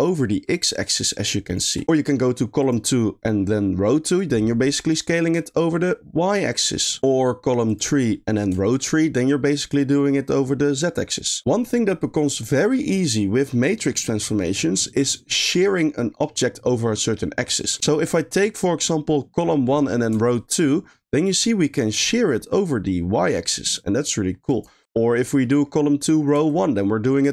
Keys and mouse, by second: 2.6 click, 2.9 middle click, 4.2-7.0 shift+drag, 7.7 click, 8.1 middle click, 8.7-11.4 shift+drag, 17.7 middle click, 18.1-18.6 middle drag, 20.4-24.5 shift+drag, 24.8 middle click, 25.5 middle click, 26.5-27.3 shift+drag.